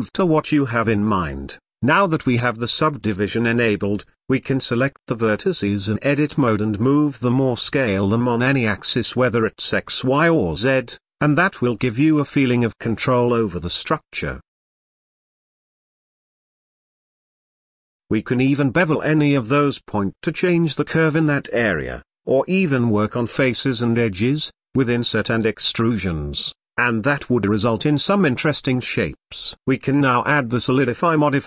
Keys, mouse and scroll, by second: 0.9 Tab, 3.7-5.1 shift+middle drag, 5.1 g, 6.5 middle click, 7.0 s, 9.6 scroll up 1, 9.7-10.9 middle drag, 11.4 ctrl+i, 12.2 ctrl+click, 12.6-13.6 middle drag, 13.6 s, 15.2 KP_1, 15.5 g, 17.0 middle click, 18.8 scroll down 2, 18.9 middle click, 19.0 click, 19.2-19.8 middle drag, 19.8 g, 22.6 ctrl+shift+b, 25.7-26.5 middle drag, 26.5 Tab, 27.0-29.1 middle drag, 29.5-31.4 drag.